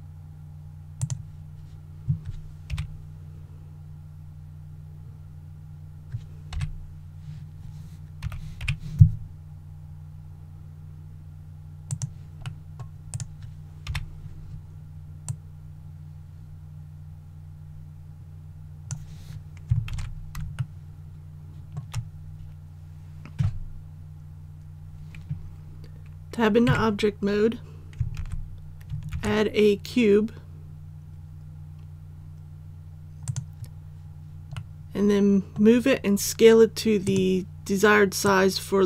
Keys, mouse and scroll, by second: 1.0 click, 2.7 KP_1, 4.9 scroll up 1, 6.5 KP_3, 8.2-8.6 typing, 11.8 click, 12.4 middle click, 13.1 right click, 13.8 KP_1, 15.2-19.6 drag, 19.9 alt+a, 20.5-21.7 shift+middle drag, 26.6 Tab, 28.1 alt+a, 29.1 shift+a, 33.2 click, 34.5-35.7 middle drag, 37.0-38.8 drag.